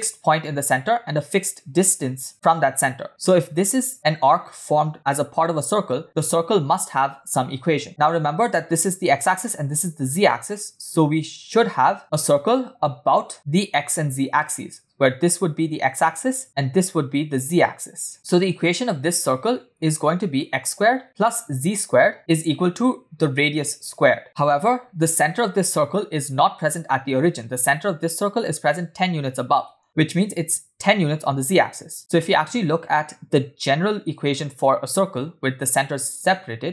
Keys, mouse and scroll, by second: 4.7 click, 6.4-7.6 ctrl+drag, 13.1-14.5 drag, 15.5 click, 16.6 click, 18.1 click, 19.7 click, 20.9 click, 22.1 click, 22.2 ctrl+z, 23.5 click, 24.0 click, 24.2 shift+middle click, 27.0 click, 31.1 click.